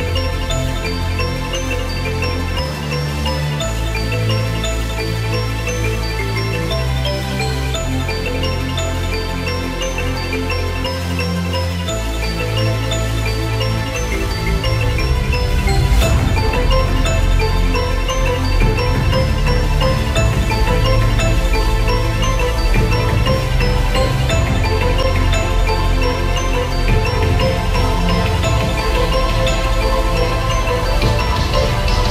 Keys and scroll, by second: 7.0 Return, 12.3 Return.